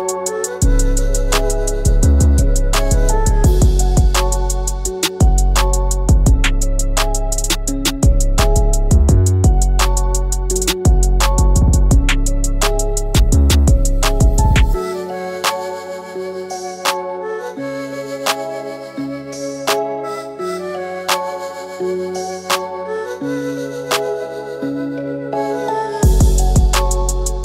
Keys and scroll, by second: 25.2 Right.